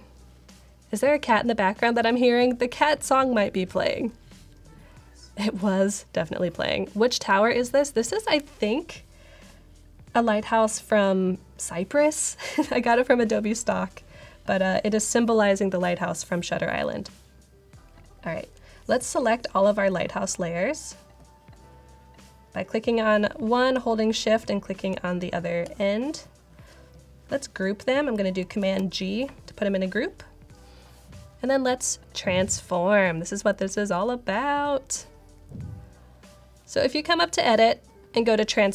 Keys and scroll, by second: 28.5 super+g.